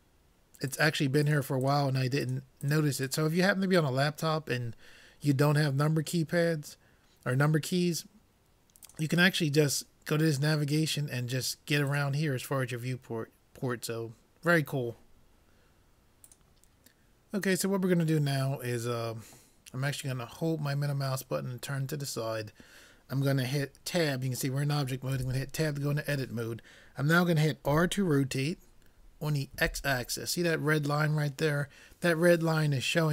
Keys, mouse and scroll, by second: 8.9-10.6 drag, 11.9-13.8 drag, 20.3-22.2 middle drag, 25.3 Tab, 27.7 r.